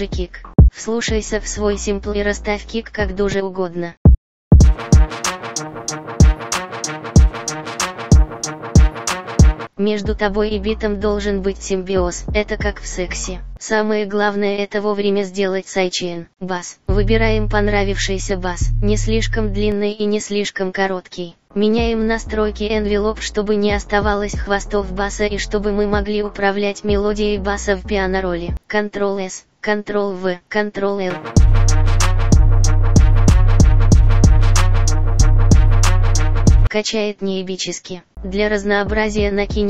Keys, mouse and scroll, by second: 15.5 Return, 15.7 Escape.